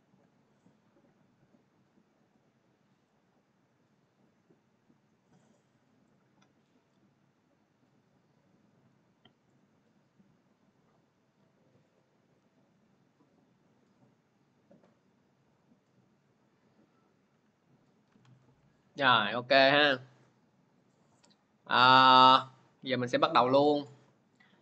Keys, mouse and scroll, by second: 3.0 click, 5.9 click, 9.5 click, 12.0-14.5 drag, 20.9-24.6 drag.